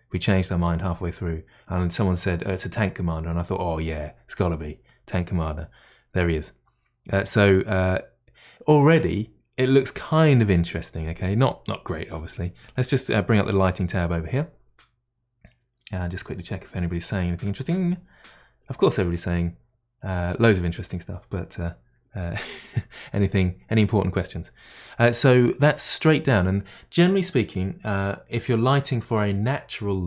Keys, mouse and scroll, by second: 4.9-8.1 middle drag, 8.1-9.4 scroll down 1, 9.4-10.8 scroll down 1, 10.8-12.2 scroll down 1, 12.2-13.4 scroll down 1, 13.4-14.5 drag, 24.9-30.0 middle drag.